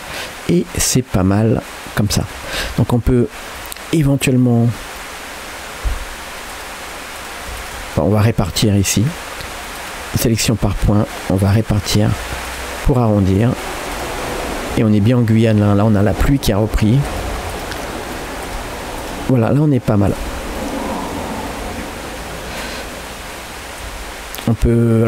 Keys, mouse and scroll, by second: 2.5 scroll up 2, 2.6 Tab, 3.6-4.7 middle drag, 5.0 middle click, 6.5-8.0 drag, 8.0 middle click, 8.4 g, 9.8 click, 10.5 click, 10.9 g, 11.8 click, 12.1 g, 13.1 click, 13.4 middle click, 14.0 click, 14.3 middle click, 14.8 g, 15.5 click, 15.9 middle click, 16.8 g, 17.5 click, 17.8 middle click, 18.5 click, 19.3 g, 20.0-20.6 scroll down 2, 20.2 Tab, 20.6-23.5 middle drag, 23.6 scroll up 2, 23.9 Tab, 24.5 click.